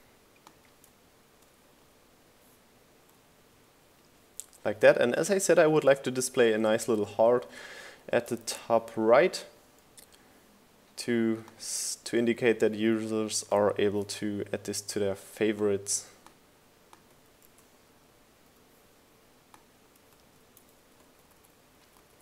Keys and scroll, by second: 0.9 Down, 4.5 Down, 5.8 Up, 12.2 super+s, 21.1 super+c.